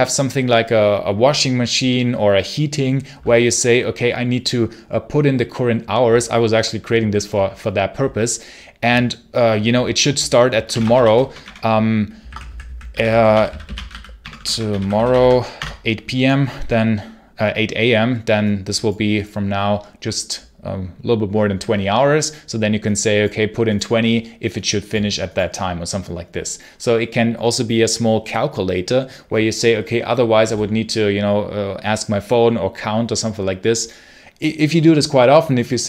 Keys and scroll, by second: 10.2-15.5 typing.